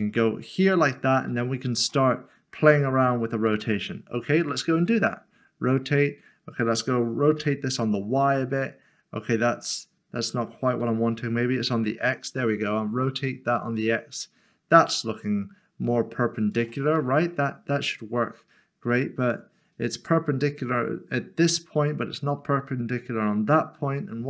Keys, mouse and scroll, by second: 1.3 s, 1.4 shift+middle click, 2.2 scroll up 1, 3.4-4.8 scroll down 1, 4.8 typing, 7.4 typing, 11.0-11.8 typing, 16.5 click, 17.0 middle click.